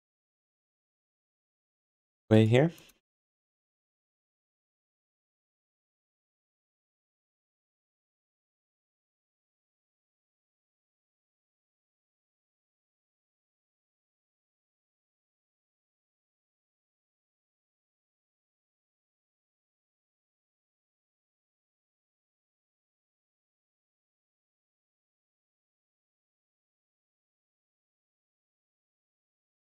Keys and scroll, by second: 3.0-4.5 typing, 9.7 d, 13.3 q, 13.8 d, 15.7 w, 16.0 d, 20.5 q.